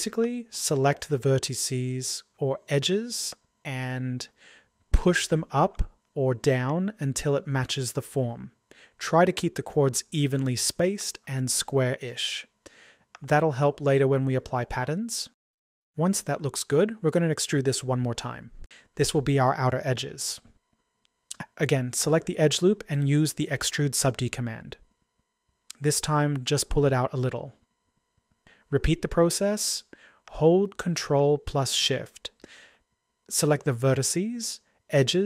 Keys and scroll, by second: 20.1 typing.